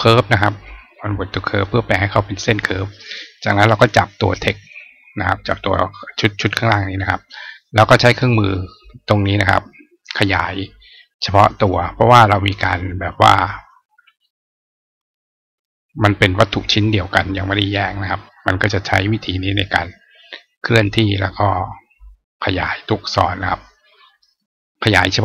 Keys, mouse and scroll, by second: 0.3 right click, 1.3 click, 2.5 click, 3.7-4.6 drag, 9.7 click, 11.5-13.3 drag, 14.9 click, 16.3-17.5 drag, 18.7-20.7 drag, 21.9-22.5 drag, 23.3-24.2 drag.